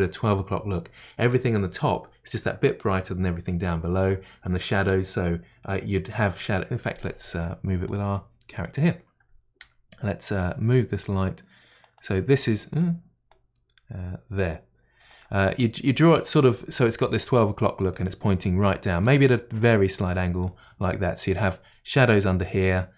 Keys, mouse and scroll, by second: 8.5 click, 9.6 g, 10.7-11.8 middle drag, 11.8 click, 12.1 g, 13.3-16.3 drag, 17.2-19.6 middle drag, 19.6-22.6 drag.